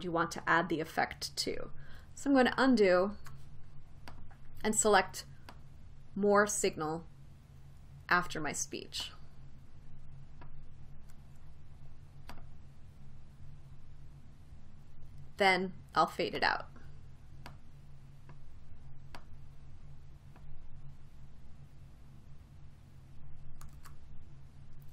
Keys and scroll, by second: 3.8 super+z, 6.2 super+z, 24.4 super+z.